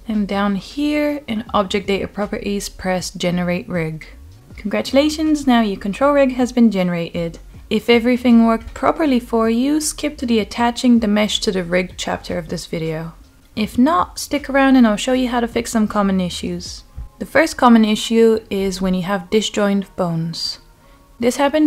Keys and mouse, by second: 3.6 click, 5.8-10.7 middle drag, 12.0 middle click, 15.0-16.4 middle drag, 17.0-18.2 middle drag, 19.0 click, 19.4-19.7 middle drag, 20.4 middle drag.